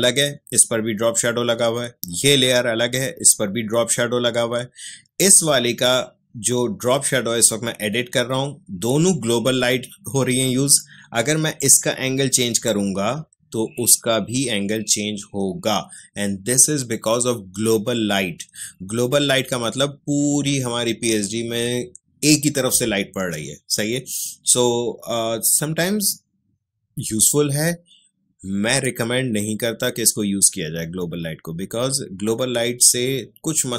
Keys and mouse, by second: 11.6-20.9 drag.